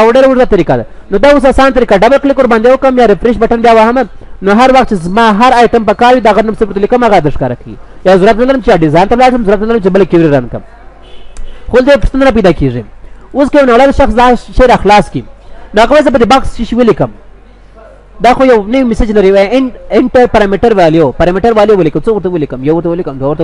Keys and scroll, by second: 11.4 ctrl+w.